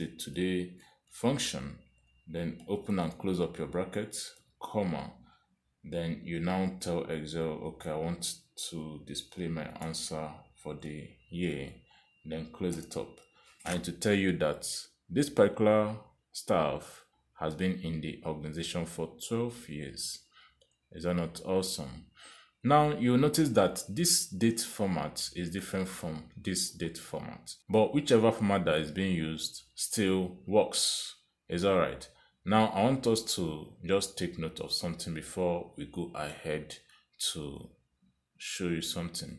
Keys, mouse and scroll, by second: 0.7-2.2 typing, 3.7 shift+9, 3.9 shift+0, 5.4 ,, 8.7 shift+', 9.7 y, 10.8 shift+', 12.5 shift+0, 13.8 Return, 25.5 click, 26.6 click, 28.8 click, 29.3 click, 31.5 click, 32.7 click.